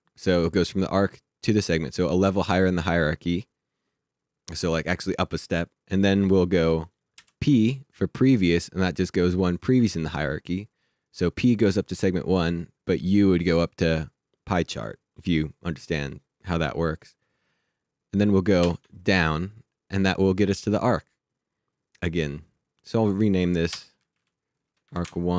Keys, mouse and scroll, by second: 6.9 typing, 18.1 click, 18.6 shift+d, 22.9 click, 23.7 Return, 24.1 Right, 24.6 space, 24.8 1, 25.0 Return.